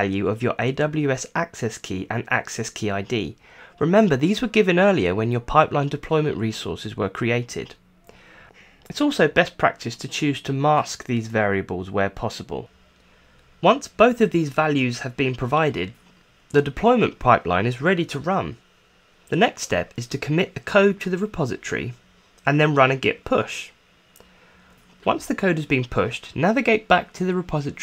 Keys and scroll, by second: 10.3 super+c, 17.1 super+c, 19.4-23.7 typing, 23.8 Return.